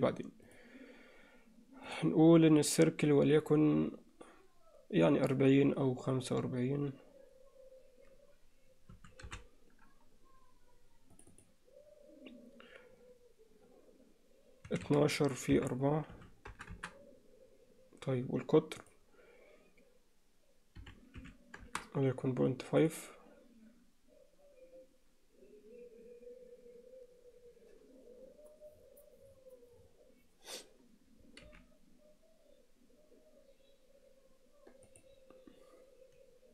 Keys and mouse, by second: 1.9 click, 2.6-17.2 drag, 21.3 click, 31.5 g.